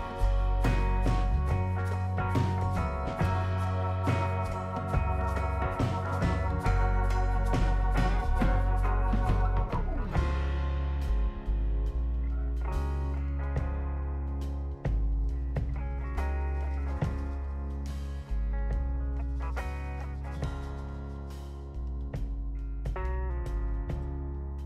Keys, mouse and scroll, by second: 0.7 click, 1.9 click, 2.8 scroll up 2, 3.1 right click, 3.9 click, 5.0 click, 6.5 click, 7.2 click, 7.3 click, 10.3 click, 11.7 click, 13.5 click, 16.5 scroll down 1, 16.9 click, 17.6 right click, 18.0 scroll up 2, 18.3 right click.